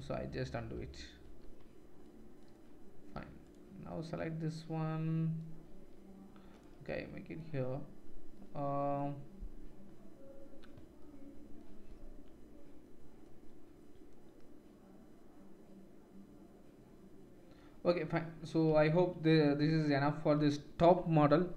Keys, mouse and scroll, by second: 1.5 ctrl+z, 3.4 shift+middle click, 3.4 shift+right click, 18.7 Tab, 19.7 ctrl+s.